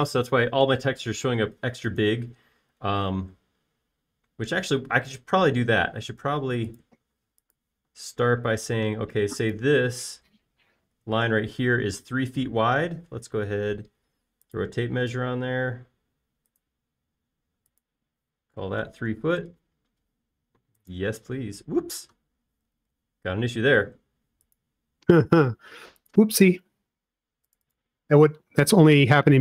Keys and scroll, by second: 6.1 space, 9.4 l, 12.6 space, 19.9-20.6 typing, 22.7 space, 23.9 super+z.